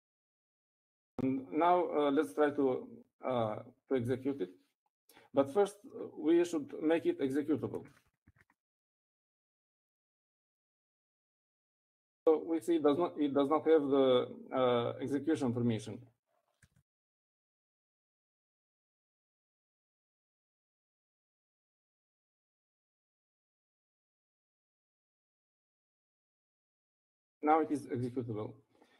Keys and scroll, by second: 0.6-3.5 typing, 8.9-10.0 typing, 11.2-11.7 typing, 17.9-22.8 typing, 24.3-27.7 typing.